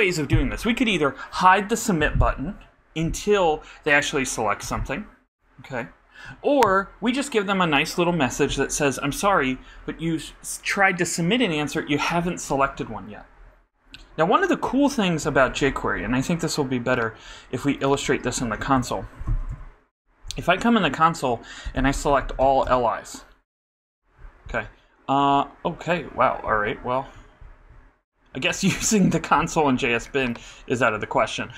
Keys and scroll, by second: 18.8-20.0 typing, 21.8-22.9 typing.